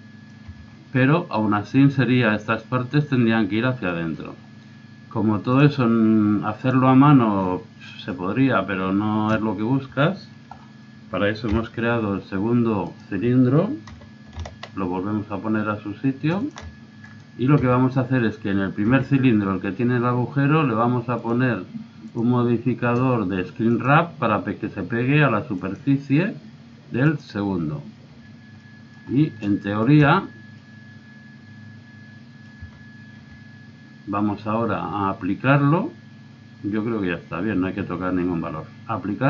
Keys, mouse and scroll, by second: 0.4 z, 0.7 middle click, 1.0-2.8 middle drag, 3.9 middle click, 4.1 middle click, 5.4 click, 5.7 click, 6.7 1, 7.4-8.8 middle drag, 9.7-11.5 middle drag, 11.5 KP_1, 13.9 g, 17.1 right click, 17.6 z, 17.8 middle click, 18.7 middle click, 18.8 z, 21.2-23.7 drag, 25.5-27.3 drag, 27.4 middle click, 28.1 z, 28.4 middle click, 30.0 z, 31.0-32.2 drag, 32.6 z, 33.2 z.